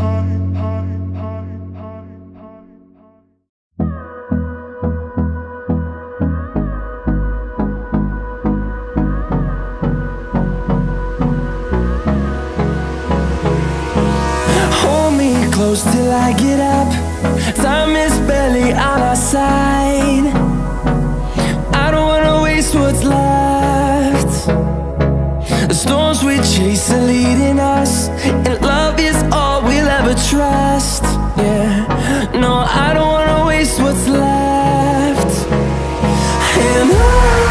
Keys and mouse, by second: 3.0-5.9 drag, 8.0-8.4 drag, 11.2-13.3 drag, 15.7 click, 16.5 middle click, 17.6 middle click, 18.6-23.3 drag, 30.8 middle click, 32.2-32.7 drag, 33.4-34.0 drag.